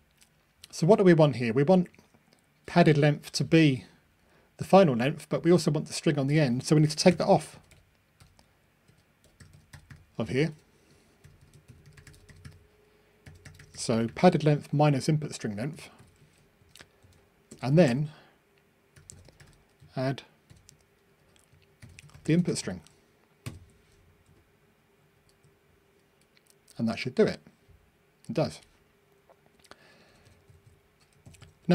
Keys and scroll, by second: 0.1 Escape, 23.5 super+F9, 25.1 ctrl+r.